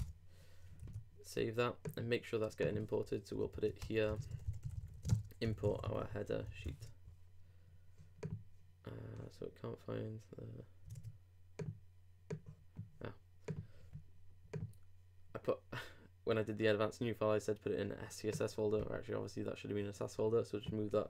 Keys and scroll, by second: 0.8 super+Return, 3.4 super+Down, 3.5 super+Right, 3.9-5.4 typing, 6.6 super+;, 10.9 super+Tab.